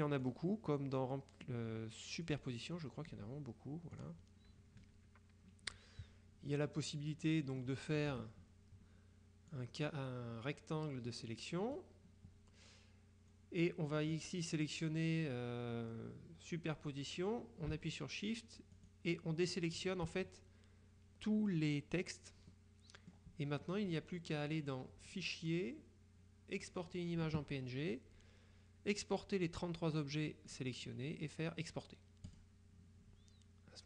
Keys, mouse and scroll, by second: 0.3 click, 2.3 click, 4.0 click, 4.9 KP_Subtract, 6.6-8.1 middle drag, 8.2 KP_Subtract, 9.5-12.4 drag, 14.1 middle click, 18.9 shift+click, 22.6-23.7 drag, 25.2 click, 26.7 click, 30.6 click, 32.4 click.